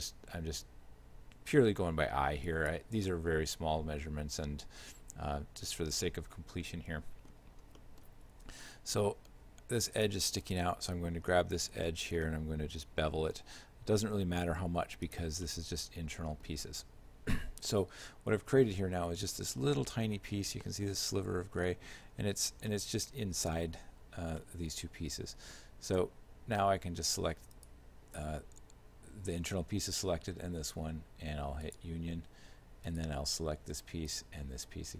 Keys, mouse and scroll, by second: 3.1 shift+middle click, 7.7 scroll up 1, 7.8 middle click, 8.3 Tab, 9.3 ctrl+Tab, 10.5 right click, 11.6 shift+middle click, 12.8 ctrl+b, 15.5 shift+middle click, 17.0 Tab, 19.4 shift+middle click, 21.7 shift+middle click, 22.4 z, 22.7 shift+middle click, 23.9 z, 24.4 shift+middle click, 27.6 shift+right click, 31.7 click, 32.9 right click, 34.1 shift+right click.